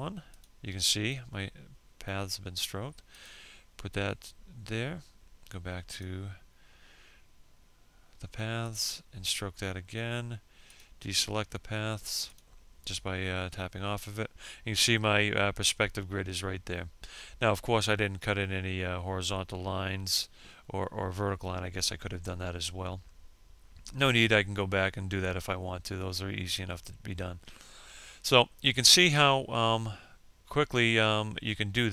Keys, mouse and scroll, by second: 27.2 scroll up 1.